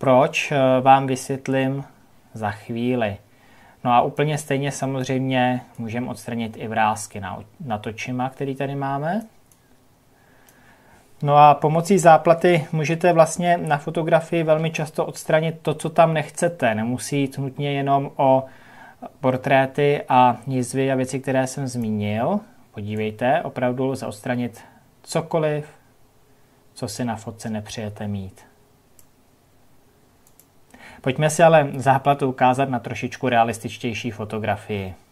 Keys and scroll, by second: 12.4 ctrl+KP_Subtract.